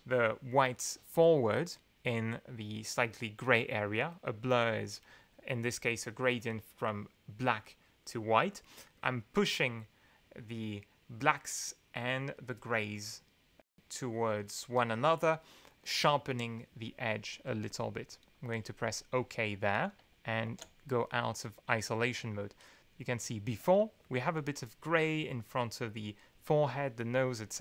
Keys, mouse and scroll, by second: 18.5 click, 20.4 alt+2, 21.4 click, 22.8 click.